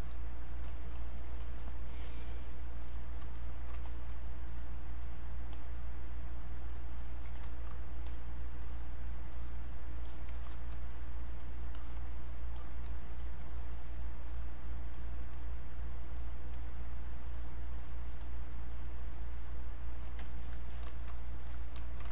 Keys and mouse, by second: 0.6 shift+click, 2.8 click, 4.4 click, 7.4 click, 8.1 click, 10.1 alt+click, 10.9 click, 11.8 alt+click, 13.7 alt+click, 20.2 ctrl+right click, 20.7 click, 21.5 click.